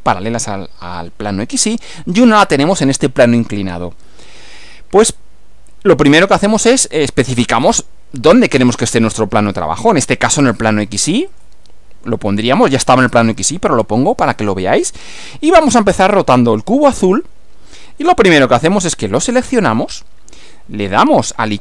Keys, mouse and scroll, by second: 11.3 click, 12.6 click, 19.6 click.